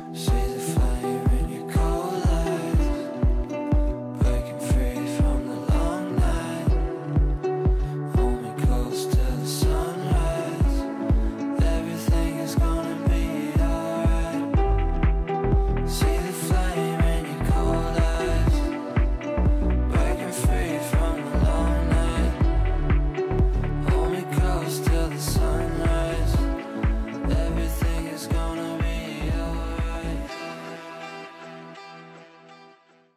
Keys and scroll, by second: 17.7 w, 24.3 ctrl+z, 26.9 ctrl+shift+z.